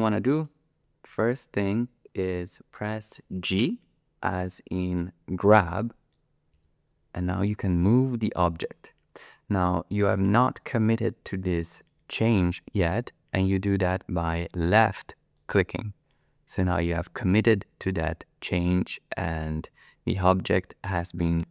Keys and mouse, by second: 0.4-2.0 middle drag, 2.0 click, 2.0 middle click, 2.2 click, 2.3 middle click, 6.6 g.